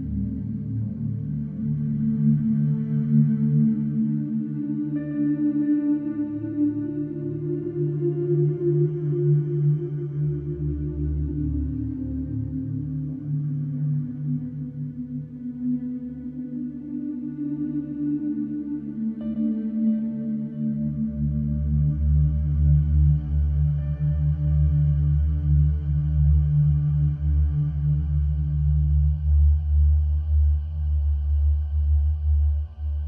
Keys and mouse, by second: 1.5 click, 2.7-6.3 ctrl+alt+drag, 7.6-11.4 alt+drag, 11.9-21.0 drag, 22.1 click, 24.3 click, 28.1 click, 30.1 click.